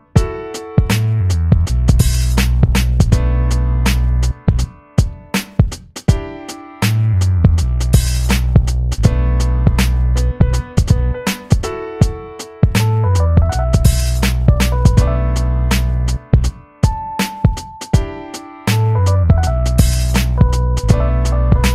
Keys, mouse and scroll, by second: 0.7 b, 7.0 ctrl+b, 11.5 click, 12.7 click, 15.3 s, 21.0 click.